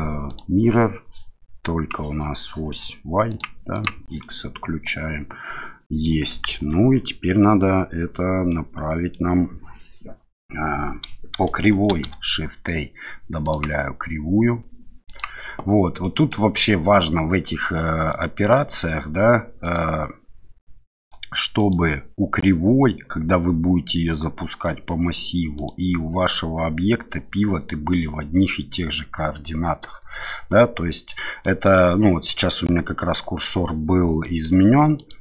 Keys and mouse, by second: 3.3 click, 3.8 click, 4.2-6.0 middle drag, 6.5 KP_1, 8.5-9.1 middle drag, 11.9 shift+a, 16.0 middle drag, 18.1 click, 19.6 click, 20.9 middle click, 21.6 click, 25.5 click, 31.4 middle click, 34.2 middle click, 34.9 click.